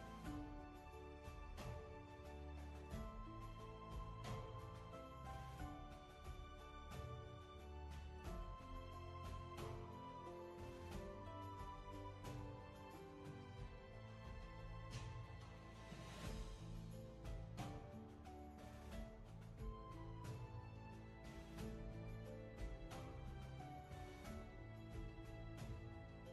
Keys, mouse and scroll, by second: 12.4-12.9 scroll down 1, 13.0 space.